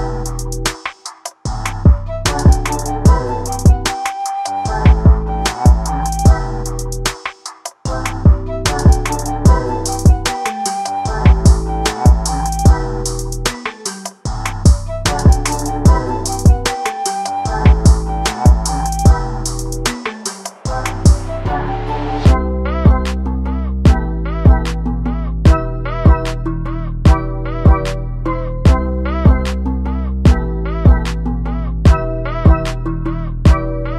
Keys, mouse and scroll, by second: 0.0 z, 0.1 scroll up 1, 0.2 shift+middle click, 0.8 /, 1.0 middle click, 1.4 alt+a, 1.5 middle click, 2.0 3, 2.3 click, 2.7 middle click, 3.1 ctrl+click, 3.1 middle click, 3.6 ctrl+click, 3.7 middle click, 4.1 ctrl+click, 4.2 middle click, 4.6 ctrl+click, 4.7 middle click, 5.4 ctrl+click, 6.0 s, 6.3 r, 6.7 g, 7.5 s, 8.5 Tab, 8.6 alt+a, 8.7 middle click, 8.9 click, 9.0 right click, 9.2 alt+a, 9.3-9.7 middle drag, 9.7-10.0 scroll down 2, 10.0 KP_1, 10.2 KP_3, 10.4 KP_9, 10.7 KP_3, 11.0 click, 11.1 Tab, 11.4-11.8 scroll up 1, 11.8 click, 12.2 ctrl+KP_Add, 12.3 ctrl+KP_Add, 12.4 ctrl+KP_Add, 12.5 ctrl+KP_Add, 12.9 ctrl+KP_Add, 13.5 a, 14.0 g, 15.1 r, 15.4 g, 16.9 s, 17.8 s, 18.5 s, 19.4 g, 20.4 click, 20.7 o, 21.0 g, 21.6 click, 21.8 g, 22.2 click, 23.4 g, 23.6 click, 23.8 g, 23.9 click, 24.0 g, 24.8 click, 25.6-28.0 typing, 25.8 click, 26.8 click, 27.1 click, 27.8 click, 29.2 click, 29.4 g, 29.8 scroll down 1, 29.9 scroll up 1, 30.0 Tab, 30.2 alt+a, 30.3 middle click, 30.6 scroll up 1, 30.7 middle click, 31.0 click, 31.1 scroll down 1, 31.2 Tab, 31.3 scroll up 1, 31.4 middle click, 31.9 click, 31.9 middle click, 32.2-32.6 ctrl+KP_Add, 32.8 middle click, 33.3 a, 33.6 g.